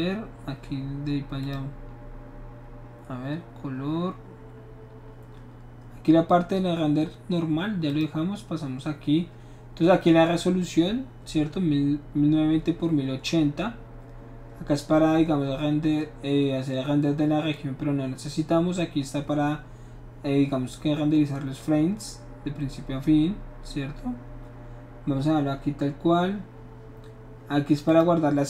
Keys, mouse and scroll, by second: 1.4 click, 1.9 scroll down 1, 3.8-4.1 scroll down 1, 7.9 click, 27.9 click.